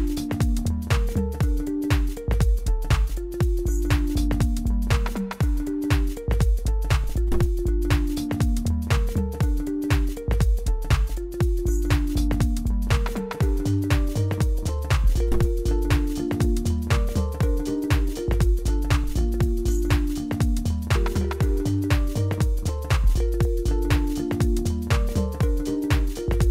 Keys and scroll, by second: 0.0-0.8 typing, 1.9-3.4 typing, 5.3 Tab, 5.6-9.1 typing, 7.6 Return, 9.9 Delete, 13.0 ctrl+r, 17.2 s, 17.7 x, 19.1 ctrl+r.